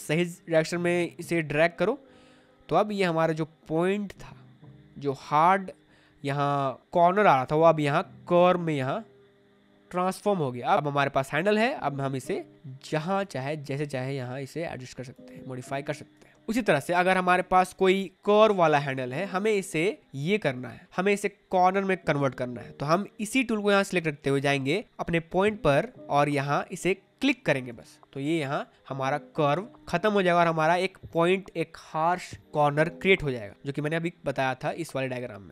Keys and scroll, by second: 18.2 space.